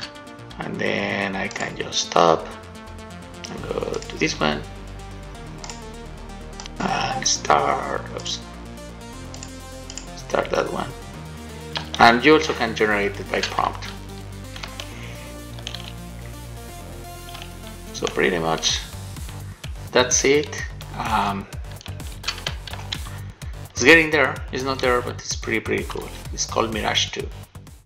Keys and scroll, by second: 12.3 shift+w, 14.1 shift+w, 14.7 a, 15.8 w, 17.6 a, 21.4 d, 22.6-23.6 typing.